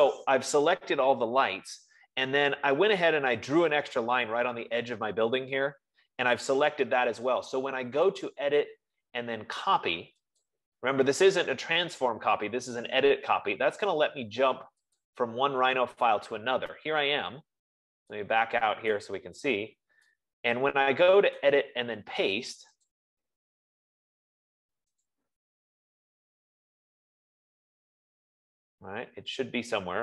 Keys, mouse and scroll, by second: 8.8 click, 10.9 click, 15.9 click, 18.3 click, 18.3-18.7 scroll, 20.1 right click, 22.8 right click, 23.3 click, 25.8 click, 28.2 middle click, 29.0 middle click.